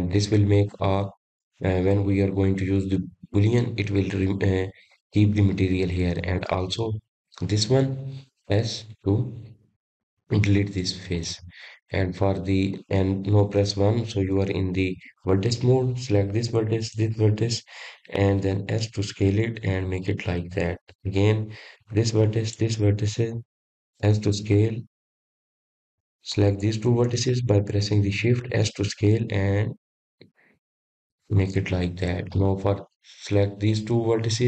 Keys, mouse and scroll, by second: 0.0 3, 0.5 click, 1.6 x, 10.5 click, 12.7 x, 16.3 click, 17.8 1, 18.9 click, 20.9 shift+click, 22.8 s, 25.0 click, 25.7 click, 26.5 click, 28.3 s, 30.6 shift+click, 32.7 s.